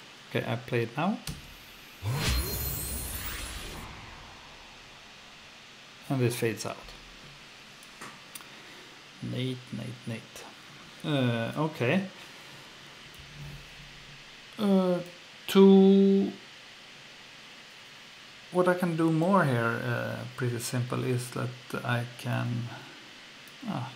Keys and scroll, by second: 1.3 F2.